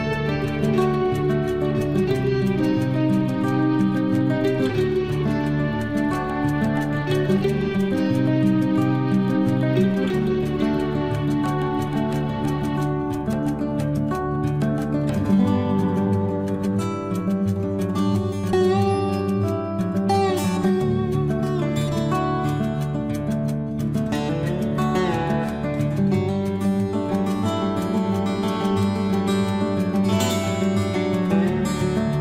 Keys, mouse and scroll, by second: 0.2-1.5 middle drag, 1.5-3.3 scroll up 1, 9.2 middle click, 9.3-10.7 middle drag, 10.7 click, 16.4 typing, 16.5 scroll up 1, 17.3 click, 18.7-19.9 typing, 22.1-23.2 typing, 24.6 Return, 26.5 click, 28.4 Return, 29.1 scroll down 1, 29.9-30.6 scroll up 1.